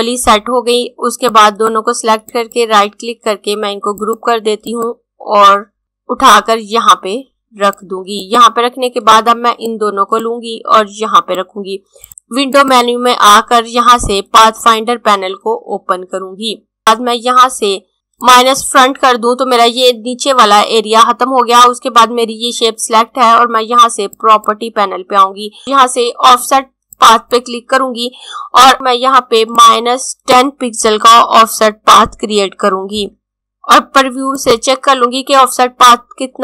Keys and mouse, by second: 1.1 click, 2.2 right click, 3.8 click, 12.6 click, 18.3 click, 24.0 click, 29.7 click, 32.3-33.8 typing, 34.3 click.